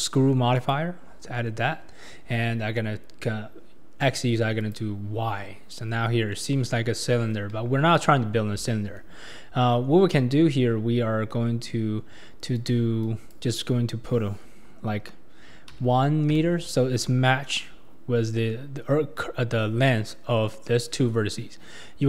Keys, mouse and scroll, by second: 4.6 click, 6.3-7.5 middle drag, 7.5 KP_1, 12.5-15.7 drag.